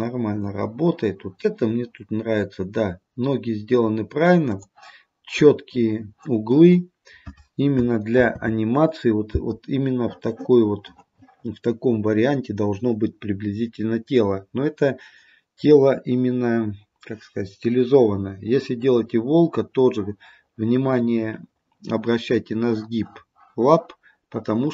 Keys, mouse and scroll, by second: 8.3 ctrl+z.